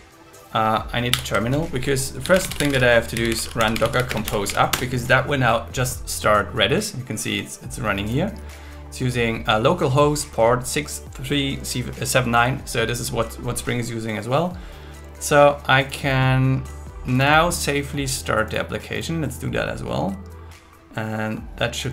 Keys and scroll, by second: 1.1 ctrl+t, 4.1 space, 4.7 Return.